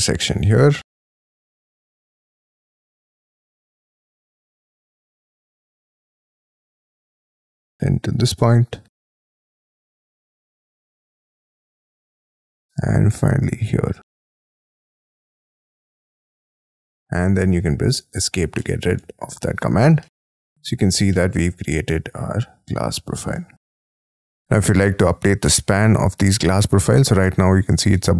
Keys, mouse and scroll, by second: 2.0-3.3 scroll down 6, 3.5-4.3 scroll down 18, 4.4 middle click, 5.1 middle click, 5.5 scroll down 6, 6.0-7.8 scroll up 38, 11.9 scroll down 6, 12.5-12.9 scroll up 8, 16.4 middle click, 17.0 scroll down 5, 18.1 Escape, 18.6 middle click, 19.0 space, 19.1-19.6 scroll down 12, 19.8 Escape, 20.0 middle click, 20.2 Escape, 20.5-20.9 scroll down 9, 21.1 shift+middle click, 21.7 middle click, 24.0-25.2 scroll up 20, 25.2 t, 27.9 space.